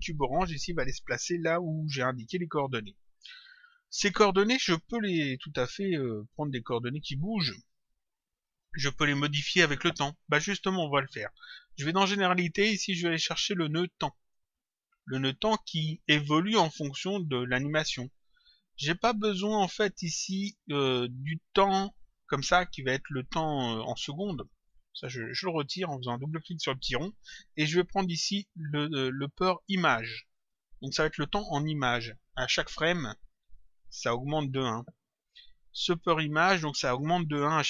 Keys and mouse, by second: 1.5 click, 11.9 click, 14.2 click, 16.6 click, 19.0 click, 20.1 click, 24.9 click, 28.0 click, 30.3 click.